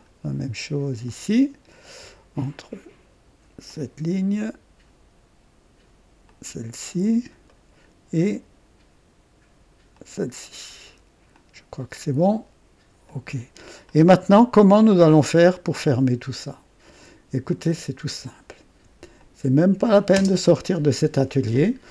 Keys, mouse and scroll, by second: 1.0 click, 3.6 click, 6.2 click, 6.9-7.3 scroll up 1, 7.5 right click, 9.9 click, 11.3 click, 13.1 click, 13.9-16.0 drag, 17.4 click, 19.2 shift+click, 20.2 space.